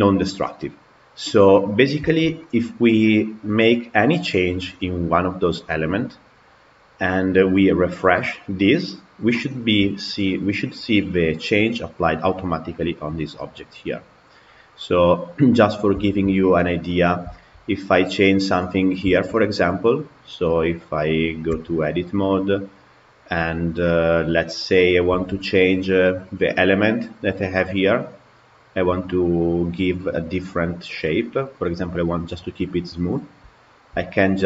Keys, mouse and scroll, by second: 7.6 click, 15.9-16.9 shift+middle drag, 16.9 scroll up 1, 17.2-17.9 shift+middle drag, 17.9 click, 18.7 scroll up 3, 19.0-21.7 shift+middle drag, 21.7 Tab, 22.2 click, 23.7-24.8 middle drag, 24.8 scroll down 2, 33.5 alt+click.